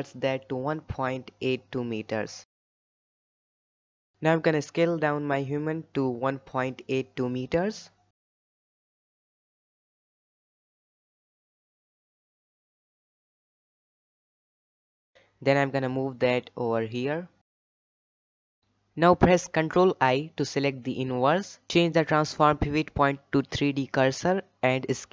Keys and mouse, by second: 2.9 KP_1, 4.8 s, 11.2 shift+middle drag, 12.1-12.8 shift+middle drag, 13.3 g, 15.5 shift+middle drag, 15.9 g, 19.8 ctrl+i, 21.0-21.3 shift+middle drag, 23.7 shift+middle drag, 24.3-25.0 shift+middle drag.